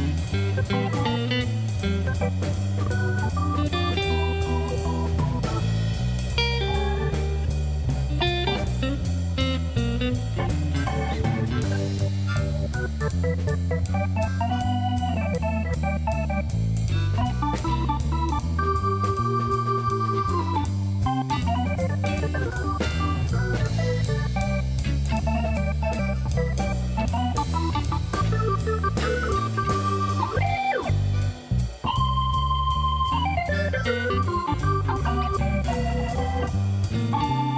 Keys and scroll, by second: 5.9 Tab, 10.6 1, 13.1 shift+z, 18.6 g, 19.0 y, 33.1 g, 33.7 y.